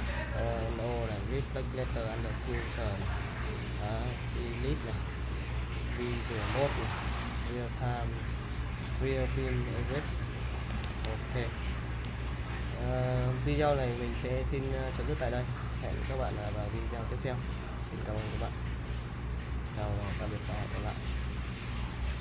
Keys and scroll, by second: 10.7 super+Tab, 10.9 super+Tab.